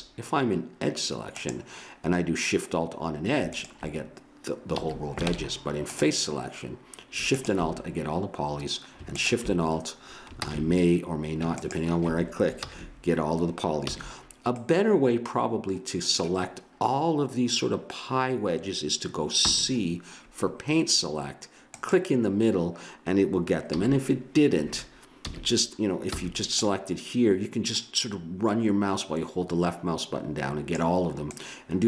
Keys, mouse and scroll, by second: 1.4-3.1 drag, 3.5-5.3 drag, 4.7 a, 5.3 ctrl+Tab, 7.3-10.4 drag, 10.4 ctrl+z, 11.6-13.4 drag, 12.6 ctrl+z, 13.8 a, 19.5 c, 25.2 a, 26.2 c.